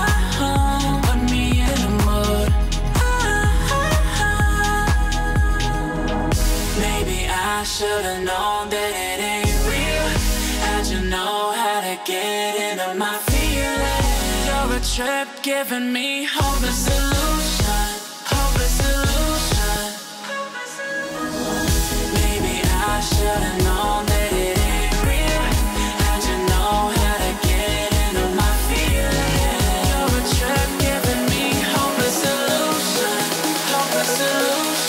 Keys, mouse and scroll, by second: 2.3-2.7 alt+scroll up 1, 3.3-4.2 shift+drag, 6.0-6.4 shift+drag, 7.5 alt+scroll down 1, 8.6-9.3 shift+click, 9.4 alt+scroll up 1, 9.9-10.4 drag, 12.1 ctrl+g, 13.0 alt+scroll down 1, 13.4 click, 14.0 alt+scroll up 1, 14.5 click, 15.8 shift+click, 17.6 click, 19.6-20.0 alt+scroll up 1, 20.7-21.4 drag, 29.1-29.6 alt+scroll up 2, 30.0-30.6 drag, 34.2 Right.